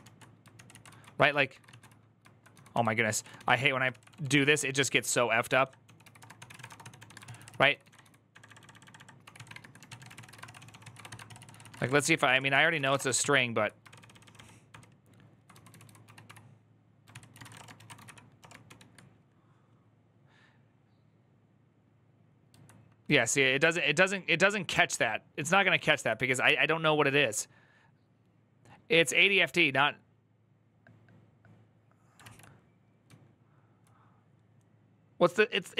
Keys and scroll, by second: 0.0-13.1 typing, 0.3 ctrl+c, 13.7 ctrl+d, 13.8 ctrl+d, 14.0 ctrl+d, 15.0-18.4 typing, 16.9 ctrl+c, 23.6 k, 25.7 alt++, 25.7 k, 32.0 alt+{, 32.8-33.6 typing.